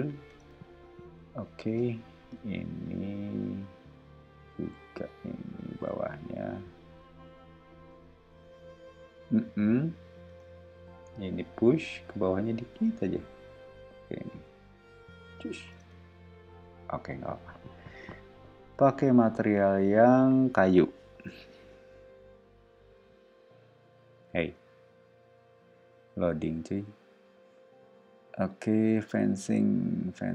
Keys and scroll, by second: 0.3 space, 1.2 o, 4.6 r, 10.3 space, 11.0 p, 15.8 space, 18.7 b.